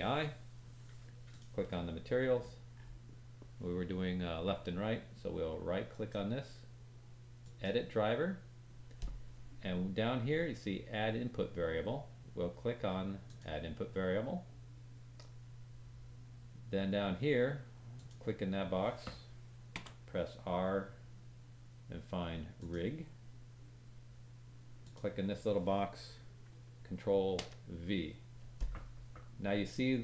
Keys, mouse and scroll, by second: 1.3 click, 2.1-4.8 scroll down 5, 5.9 right click.